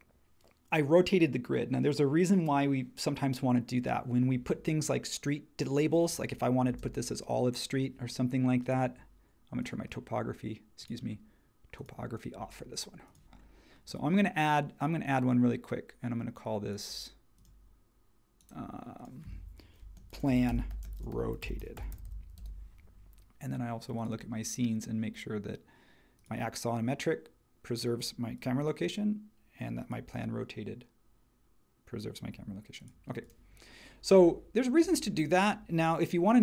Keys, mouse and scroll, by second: 6.7 space, 19.8-22.5 typing.